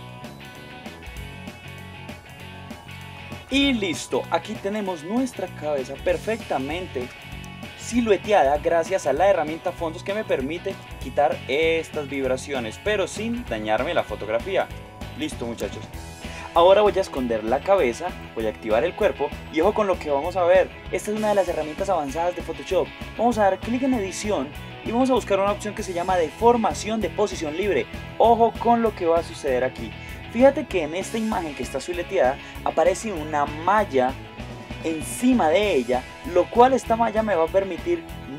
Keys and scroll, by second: 0.8 alt+super+z, 3.0 super+0, 15.3 super+0.